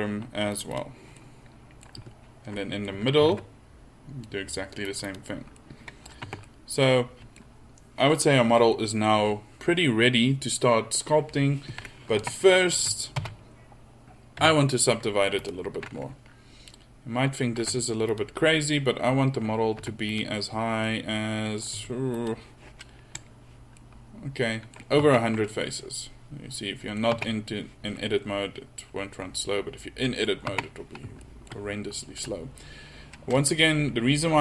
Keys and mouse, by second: 3.2 ctrl+r, 6.3 Tab, 12.2 Tab, 12.8 a, 13.2 a, 14.4 w, 17.6 w, 19.8 w, 22.3 w, 23.5-25.4 middle drag, 25.4 Tab, 26.8-27.3 middle drag, 27.6 Tab, 30.5 middle click, 30.6 Tab.